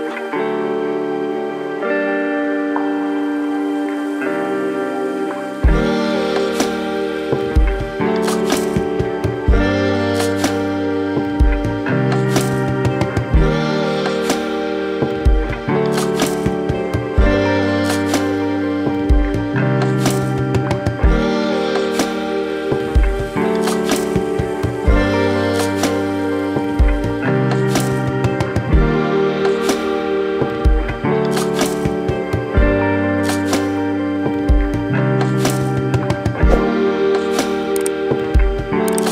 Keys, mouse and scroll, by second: 0.1 click, 1.5 click, 2.3 click, 3.0 b, 5.7 g, 9.4 middle click, 11.5 click, 12.0 scroll up 2, 12.2 shift+middle click, 13.4 g, 14.7 shift+middle click, 15.6 click, 16.8 b, 19.2 middle click, 20.0 click, 20.5 click, 20.9 b, 22.8 g, 25.4-27.0 shift+scroll down 8, 27.0 a, 28.9 click, 30.1 click, 36.0 scroll down 1, 36.3 shift+scroll up 1, 36.6 shift+middle click, 37.0 scroll up 2, 37.3 shift+middle click, 39.0 shift+middle click.